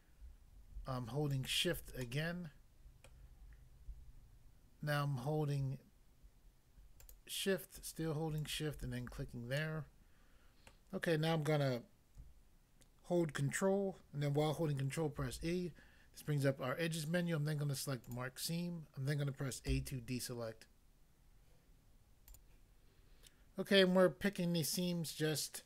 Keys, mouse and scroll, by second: 1.3 shift+click, 1.5 shift+click, 2.0 middle click, 3.1 middle click, 6.9 shift+click, 7.1 shift+click, 8.4 shift+click, 9.6 middle click, 10.7 middle click, 15.2 ctrl+e, 18.1 click, 18.2 click, 19.7 a, 22.3 click, 22.4 click.